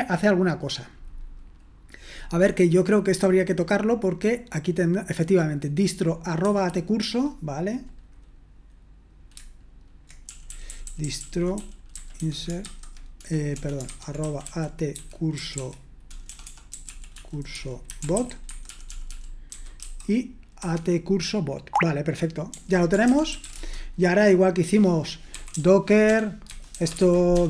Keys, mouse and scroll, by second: 3.9-6.8 drag, 7.0-8.4 drag, 10.6-20.3 typing, 20.6 Escape, 23.4 typing, 23.6 Return, 26.4-27.4 typing.